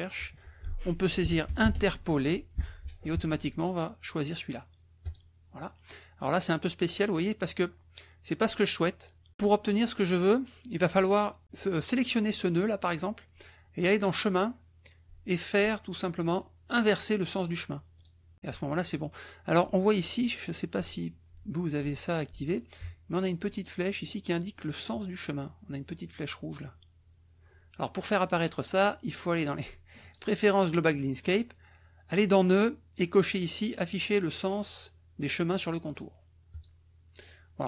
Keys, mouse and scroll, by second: 0.9-2.5 typing, 5.1 click, 11.5 click, 13.8 click, 18.0 click, 30.0 click, 36.5 click, 37.2 click.